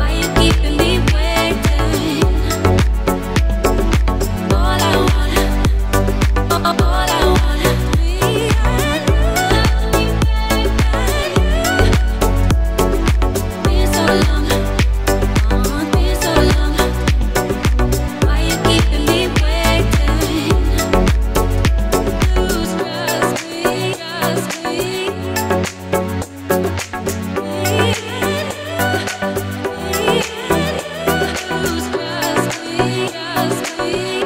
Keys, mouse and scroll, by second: 2.1 scroll up 1, 2.9 click, 5.8 scroll up 1, 6.3 click, 11.2 scroll up 1, 12.3 click, 16.6 scroll up 1, 17.4 click, 20.6 scroll down 1, 21.7 click, 27.8 scroll up 1, 28.2 click.